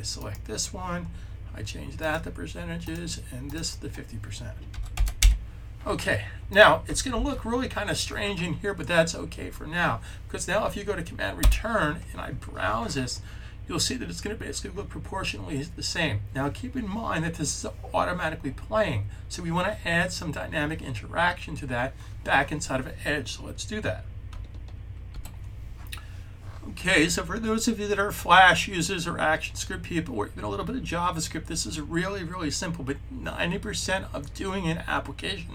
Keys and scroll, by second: 4.6 typing, 7.0 super+s.